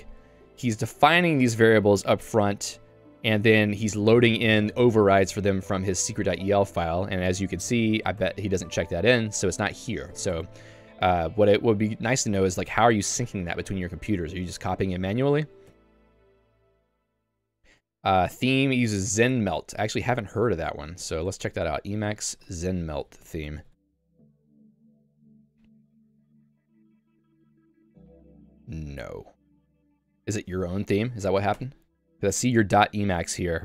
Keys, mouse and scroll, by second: 3.6 Escape, 3.9 j, 6.3 Escape, 7.7 super+e, 8.3 shift+h, 8.8 k, 9.5 k, 10.5 q, 15.8 j, 18.4 k.